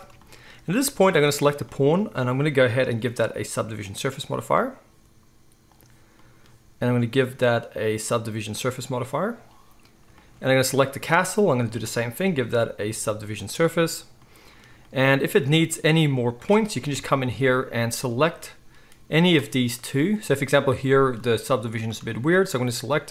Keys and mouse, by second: 1.3 click, 1.4-2.8 middle drag, 2.8-10.7 drag, 10.7 middle click, 11.5-19.2 drag, 15.3 Tab, 15.7 z, 16.9 KP_1, 19.2-19.7 middle drag, 19.7 click, 19.8 middle click, 20.7 click, 20.8-23.1 middle drag.